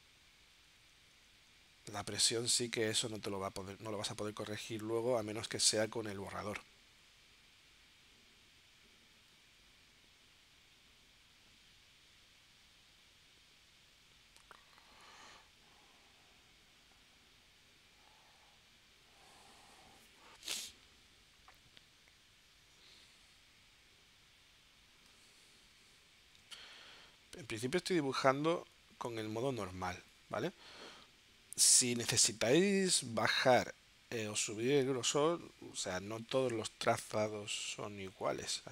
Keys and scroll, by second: 37.6 8.